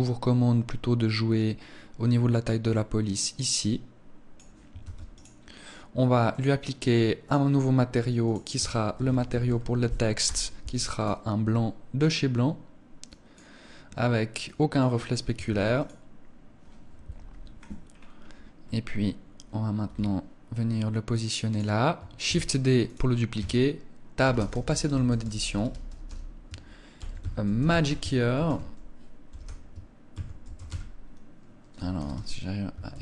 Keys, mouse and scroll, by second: 4.3 ctrl+s, 5.8 click, 6.7 click, 10.5 click, 11.5 click, 13.9 click, 14.9 ctrl+s, 16.7 KP_1, 17.5 scroll up 2, 18.1 scroll down 1, 18.7 scroll down 1, 21.1 click, 21.8 shift+d, 22.5 click, 22.9 Tab, 23.7-25.2 typing, 26.5-30.2 typing, 31.5 BackSpace, 32.3 a, 32.4 r.